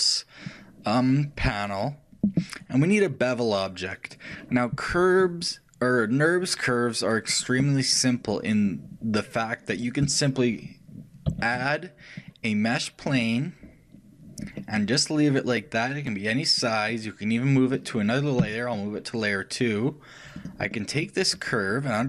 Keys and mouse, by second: 11.6 shift+a, 14.9-16.9 middle drag.